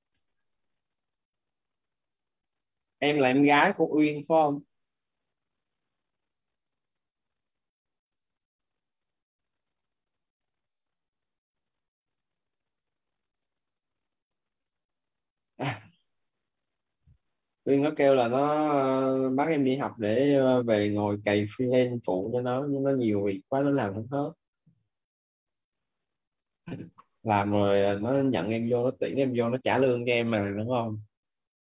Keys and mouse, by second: 0.0 n, 0.4 space, 17.5-20.3 typing, 22.0 shift+,.